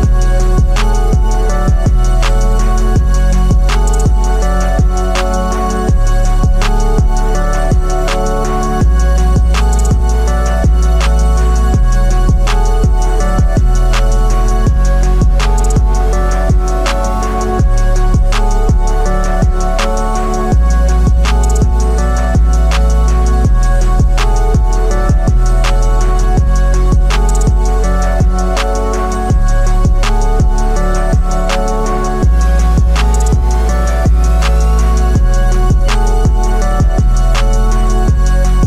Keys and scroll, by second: 3.6 ctrl+alt+z, 30.7 ctrl+i, 32.8 ctrl+i.